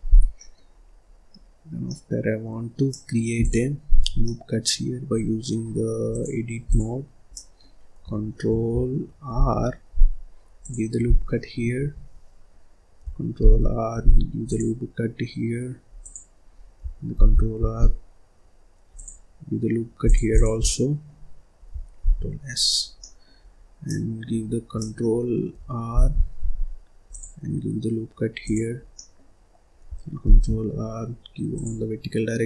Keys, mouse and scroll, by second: 0.0 scroll down 1, 0.3 middle click, 0.6-1.6 scroll up 9, 1.6 scroll down 1, 1.8-3.3 middle drag, 3.3 click, 4.0 scroll down 1, 4.1 middle click, 4.6-5.2 scroll up 1, 6.0-7.2 drag, 7.2-9.2 middle drag, 9.2 ctrl+r, 13.3 ctrl+r, 17.1 ctrl+r, 20.2 click, 20.6-21.9 middle drag, 21.9 ctrl+s, 22.7 scroll down 1, 22.9 middle click, 23.3-23.8 scroll up 1, 23.8 middle click, 24.4 scroll up 1, 24.7-25.8 middle drag, 25.8 ctrl+r, 28.7 scroll down 1, 28.9-30.1 middle drag, 30.1 ctrl+r.